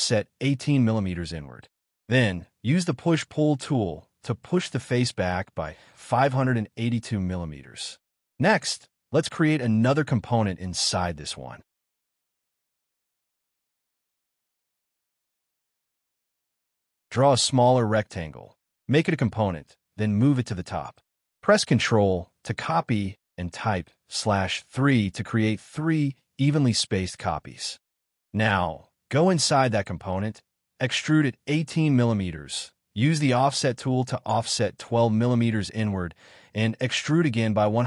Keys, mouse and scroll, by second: 3.7-4.9 typing, 5.5 Return, 6.0 space, 6.0 Escape, 6.2-6.6 scroll down 1, 6.6 middle click, 8.2 double click, 9.6 g, 10.2 scroll down 1, 10.7 right click, 11.8 scroll up 1, 12.2 middle click, 12.6 scroll up 1, 13.4 g, 15.2 r, 17.5 scroll up 1, 17.7 space, 17.9 g, 18.6 m, 19.1 space, 19.2 right click, 21.6 m, 24.3 /, 25.3 3, 25.4 Return, 26.0 y, 26.2 scroll down 1, 26.5 middle click, 26.7 space, 27.5 Delete, 27.8 scroll up 1, 28.2 middle click, 28.6 double click, 28.7-30.6 typing, 28.9 double click, 30.0 middle click, 30.5 scroll up 1, 31.0 double click, 31.5 ctrl+z, 32.4 2, 32.9 Return, 33.1 middle click, 33.4 space, 33.5 scroll up 1, 34.3 shift+middle click, 34.7 m, 34.8 scroll up 1, 37.4 scroll down 1.